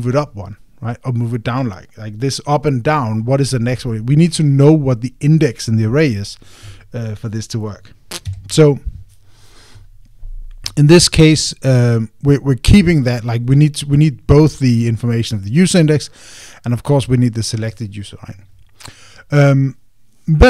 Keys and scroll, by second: 9.0 Escape.